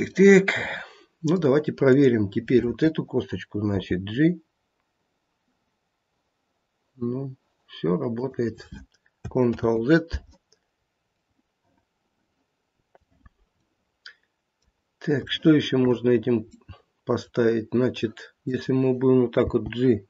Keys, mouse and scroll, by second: 0.1 middle click, 0.9 middle click, 1.2 middle click, 1.9 click, 3.8 g, 9.5 ctrl+z, 10.8-11.3 scroll up 1, 11.3 middle click, 13.6 middle click, 15.1 middle click, 15.2 shift+middle click, 15.2 shift+scroll up 1, 15.3 shift+middle click, 16.1 scroll up 1, 16.5 middle click, 18.4 click, 19.3 g.